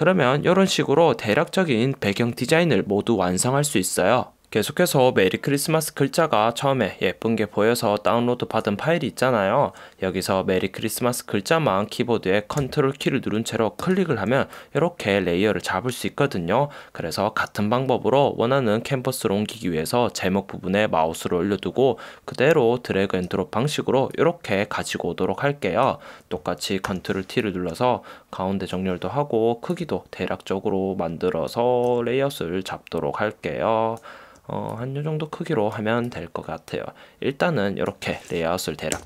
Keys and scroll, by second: 27.1 super+t.